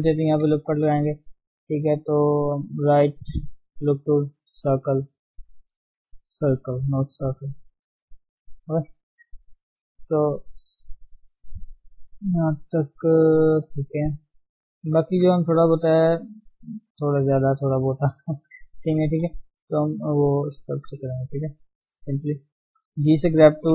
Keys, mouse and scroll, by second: 0.1 ctrl+r, 1.3 s, 4.7-6.1 right drag, 6.1 s, 7.9 g, 9.1 Tab, 9.2-9.6 scroll down 6, 13.7-14.1 scroll up 5, 15.1-15.5 scroll down 3, 15.5 shift+z, 17.2-17.6 scroll up 2, 19.4 shift+z, 20.7 scroll down 1, 21.5 ctrl+Tab, 21.7-22.6 scroll up 2, 22.7 g, 22.9 f.